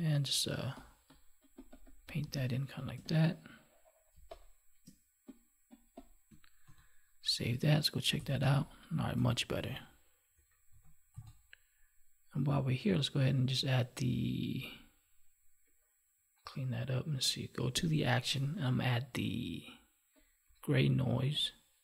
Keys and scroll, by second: 2.2 space, 4.1 space, 6.6 ctrl+s, 8.3 space, 10.3 ctrl+1.